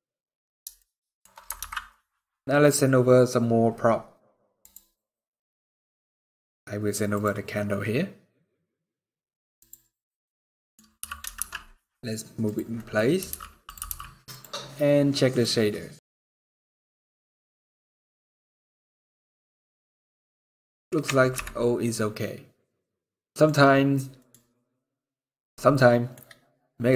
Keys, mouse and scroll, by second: 0.4 shift+middle click, 1.5 ctrl+s, 9.6 click, 10.1 middle click, 10.7 g, 12.5 middle click, 12.9 r, 13.5 g.